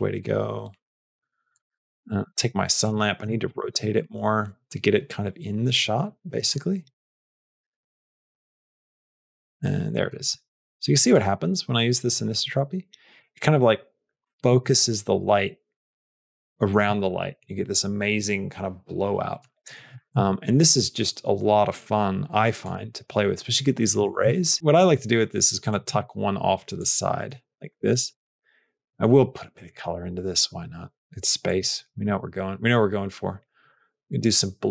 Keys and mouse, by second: 2.7 click, 3.3 r, 6.8 r, 8.0 r, 10.1 r, 11.8-13.1 drag, 14.3 r, 19.9 r, 24.0 r, 25.9 r.